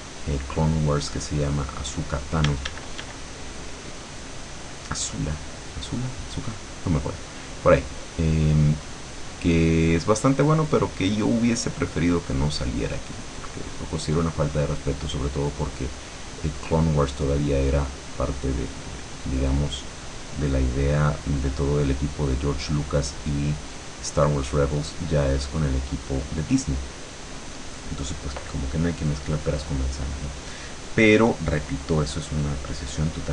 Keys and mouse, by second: 2.6 d, 3.2-5.1 drag, 7.6-9.5 drag, 9.6 click, 12.0 click, 15.0-16.3 drag, 16.5 click, 17.2 click, 19.0 click, 19.8 click, 22.7-26.0 drag.